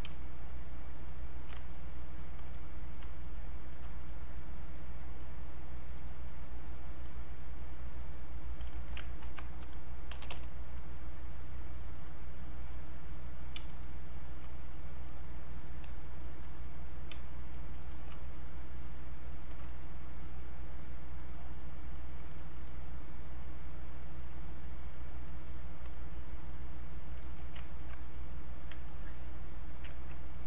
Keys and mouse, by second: 0.1 space, 0.5 click, 0.6 space, 1.0 click, 1.1 space, 1.8-8.7 shift+drag, 8.7 alt+click, 9.0 ctrl+right click, 9.9-10.7 typing, 11.0 click, 13.6 space, 14.5 click, 17.1 space, 17.5 click, 17.6 click, 17.7 space, 18.2-21.0 shift+drag, 22.3 shift+click, 23.8 shift+click, 27.2 alt+click, 27.6 ctrl+right click, 28.2 click, 28.9-30.3 ctrl+drag, 30.3-30.4 ctrl+drag.